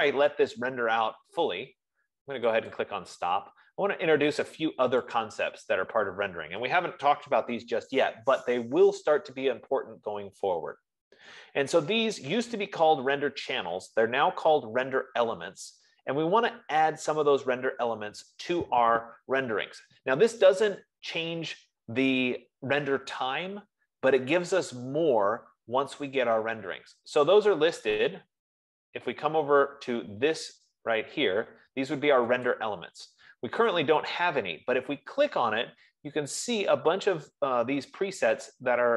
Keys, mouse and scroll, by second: 3.2 click, 5.7 click, 15.7 F15, 33.2-37.9 drag.